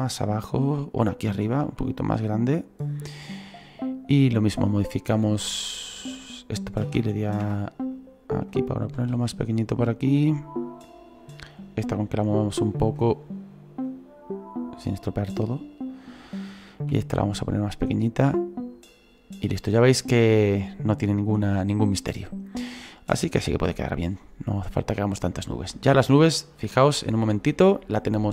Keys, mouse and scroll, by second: 1.6 s, 3.6-6.9 right drag, 6.9 shift+d, 7.9-8.9 drag, 8.9 s, 10.1-11.6 right drag, 11.6-16.3 drag, 16.3 right click, 16.8 s, 18.1-19.4 drag, 19.4-23.7 right drag, 23.7-26.7 drag.